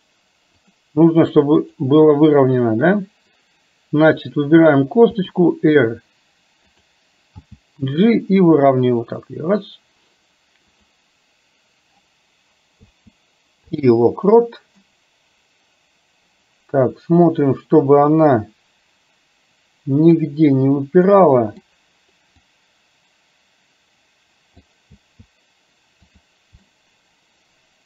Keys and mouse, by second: 1.7-5.3 drag, 5.3 r, 7.5 g, 12.7 i, 14.9-20.3 middle drag, 21.3 middle click, 22.6 click, 23.6 click, 25.0 i, 26.8-27.8 middle drag.